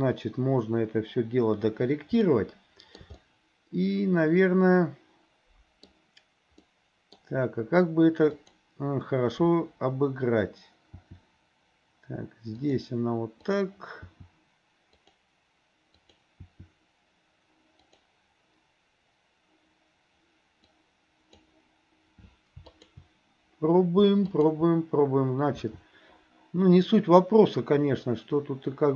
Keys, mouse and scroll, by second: 2.3 shift+middle click, 3.2-6.0 middle drag, 6.7 middle click, 8.3 click, 11.0 r, 13.5 click, 14.1 r, 16.0 click, 16.4 r, 20.8 click, 22.7 shift+click, 24.3 shift+click, 25.6 r.